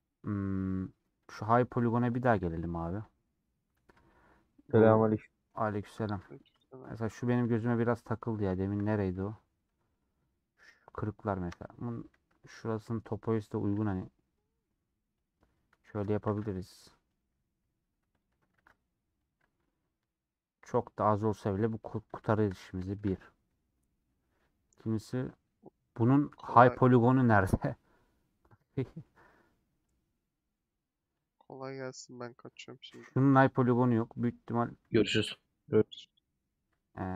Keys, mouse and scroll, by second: 3.0 click, 3.7 Tab, 4.8 click, 5.6 middle click, 6.4 click, 6.9 middle click, 7.1 scroll up 1, 7.4 2, 8.0-9.1 middle drag, 9.1 Tab, 9.6-10.7 middle drag, 10.7 click, 11.3 KP_Decimal, 11.8 Tab, 12.9 middle click, 13.7 ctrl+b, 15.9 alt+click, 16.2 ctrl+b, 18.1 alt+click, 18.5 ctrl+b, 19.7-21.5 middle drag, 21.5 scroll down 2, 21.8-23.2 middle drag, 23.2 scroll down 2, 23.4 middle click, 23.9 scroll down 1, 24.1-25.5 middle drag, 25.5-25.8 scroll down 3, 25.8-30.2 middle drag, 30.2-31.7 drag, 31.7-32.8 middle drag, 32.8 click, 33.6-37.1 middle drag.